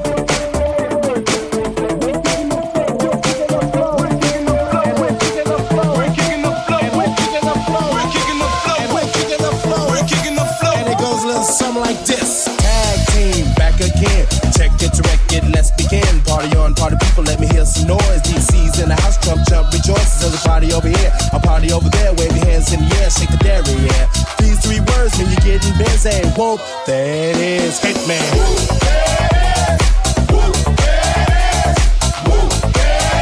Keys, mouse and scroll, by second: 0.4 middle click, 0.4 right click, 0.8 alt+right click, 10.6 Tab, 11.1 right click, 13.2 right click, 13.8 ctrl+right click, 14.5 shift+right click, 15.3 shift+right click, 15.8 Tab, 15.8-33.2 drag, 16.2 Tab, 18.4 Tab, 19.6 3, 20.0 middle click, 20.0 right click, 23.4 alt+middle click, 23.4 alt+right click, 23.8 alt+middle click, 23.8 alt+right click, 28.6 Tab, 29.3 middle click, 29.3 right click, 29.7 middle click, 29.7 right click, 30.1 middle click, 30.1 right click, 31.1 middle click, 31.1 right click, 31.4 middle click, 31.4 right click, 31.7 middle click, 31.7 right click.